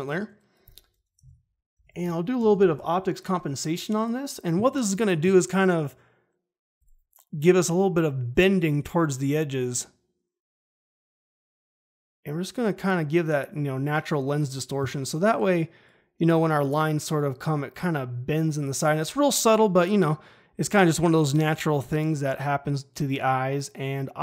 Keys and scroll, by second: 1.2-3.0 typing.